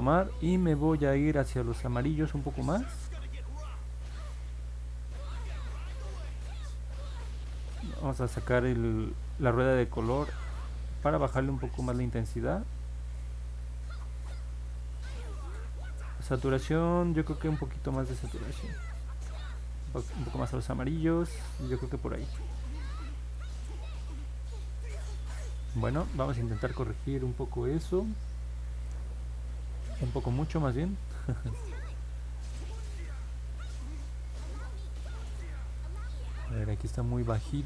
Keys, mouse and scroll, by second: 2.9-5.1 drag, 8.3-10.1 drag, 12.1-14.7 drag, 34.1-35.3 drag.